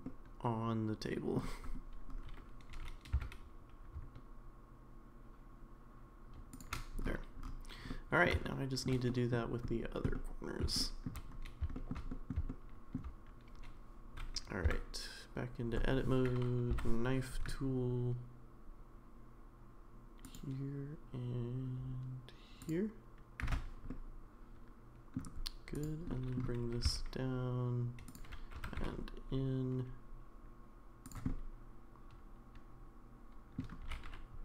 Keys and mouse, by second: 0.1-1.3 middle drag, 2.7 g, 7.9 middle click, 8.4 shift+middle click, 9.1 middle click, 10.1 middle click, 10.8 shift+middle click, 11.7 shift+middle click, 12.1 middle click, 12.5 shift+middle click, 14.7 Tab, 16.7 k, 23.9-25.2 middle drag, 25.7 click, 26.1 middle click, 26.8 g, 28.5 g, 31.3-33.6 middle drag, 33.8 g.